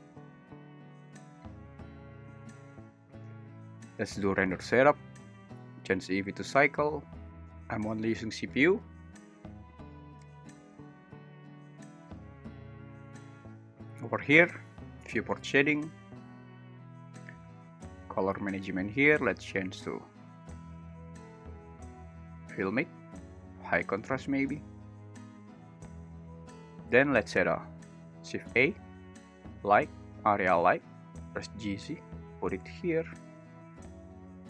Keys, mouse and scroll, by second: 5.6-6.6 drag, 15.5 click, 21.7-22.6 drag, 23.7-26.3 drag, 28.0 shift+a, 31.4 g, 31.7 z, 32.8 click, 34.3 alt+s.